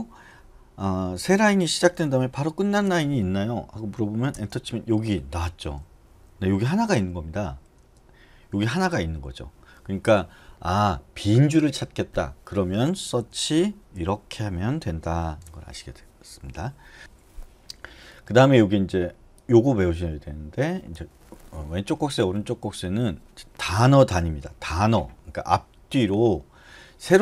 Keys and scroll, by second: 1.2 shift+6, 2.5 shift+4, 4.3 Return, 6.6-8.2 typing, 13.2 /, 15.0-15.7 typing.